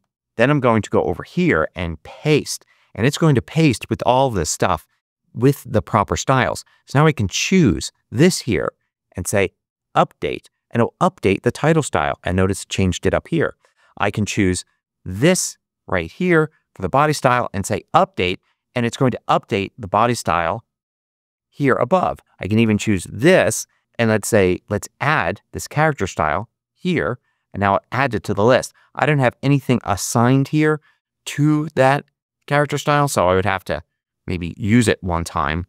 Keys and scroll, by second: 1.9 super+v.